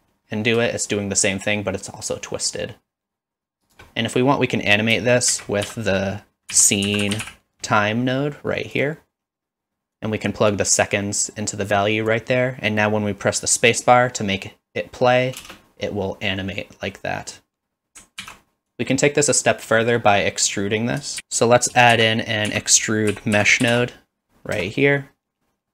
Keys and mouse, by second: 1.0-3.7 shift+drag, 5.3 shift+a, 10.6-12.1 drag, 15.4 space, 18.2 ctrl+s, 18.8 click, 19.8 middle click, 21.2 z, 21.2 x, 21.9 shift+a.